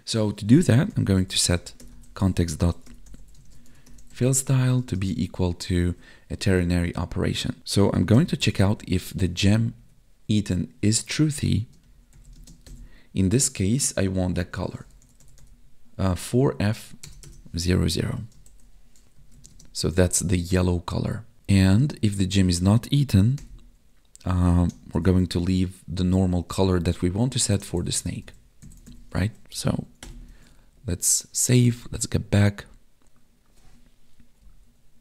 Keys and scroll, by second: 4.8 space, 5.1 space, 9.5 Down, 9.8 Tab, 11.6 space, 12.3 space, 18.0 Right, 19.1 Left, 19.3 Right, 19.5 space, 21.3 space, 21.5 Right, 21.7 space, 29.5 Right, 30.3 ctrl+s, 31.8 Tab, 34.4 Up.